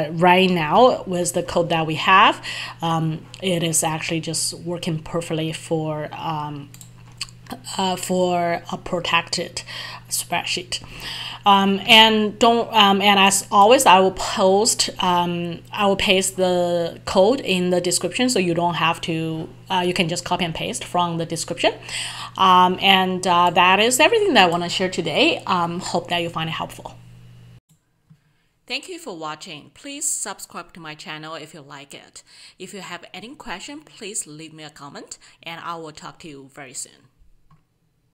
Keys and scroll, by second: 0.8 alt+F11, 12.0 alt+Tab.